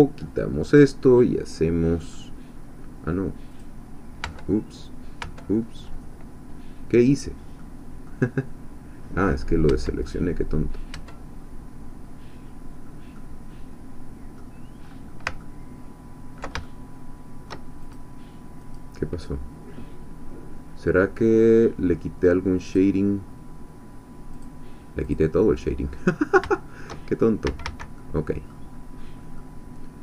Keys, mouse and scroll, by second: 0.7 click, 1.6 middle click, 3.5 click, 4.3 Tab, 5.3 Tab, 7.6 middle click, 9.7 Tab, 10.1 click, 11.0 Tab, 11.3 middle click, 11.3 scroll down 1, 13.2-14.5 drag, 14.8-15.2 scroll up 1, 15.4-16.6 ctrl+drag, 16.6-17.6 ctrl+shift+drag, 17.9 shift+click, 18.7-20.2 drag, 22.7 click, 24.4 click, 25.0 click, 25.8 scroll up 1, 26.1 shift+middle click, 26.5 shift+click, 27.4 a, 28.0 click, 28.7-29.2 scroll down 2, 29.4-30.0 drag.